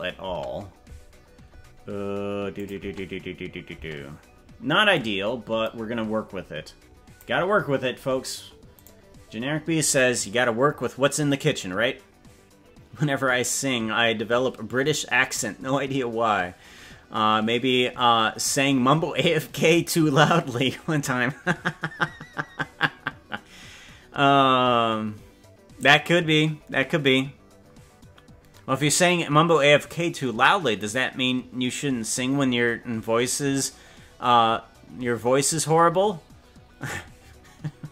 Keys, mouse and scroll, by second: 0.3 space, 2.5 click, 2.7 space, 3.7 space, 4.9-7.2 drag, 7.5-7.9 scroll down 3, 8.8 right click.